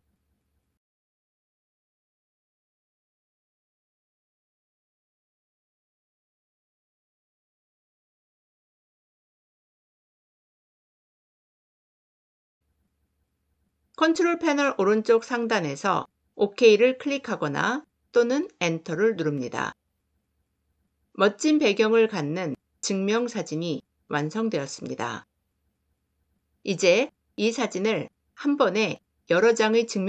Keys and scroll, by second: 17.7 Return.